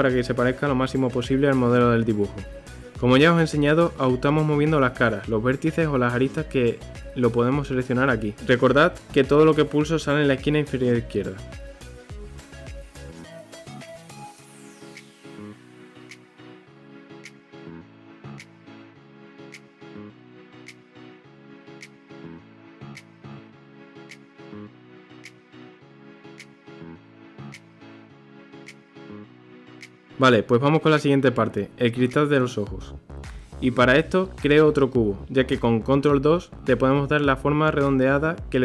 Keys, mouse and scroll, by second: 1.4 Tab, 2.7 Tab, 3.7 a, 9.9 s, 14.2-15.3 middle drag, 15.9 click, 16.4 2, 17.1 click, 17.8 click, 18.6 alt+click, 19.3-20.3 middle drag, 20.3 s, 21.5-23.3 middle drag, 23.3 click, 23.8 KP_3, 24.5 g, 25.5 g, 28.0 KP_3, 28.8 scroll, 28.9-30.6 middle drag, 30.6 Tab, 31.1-32.3 middle drag, 32.3 shift+a, 36.1 KP_3, 37.2 g.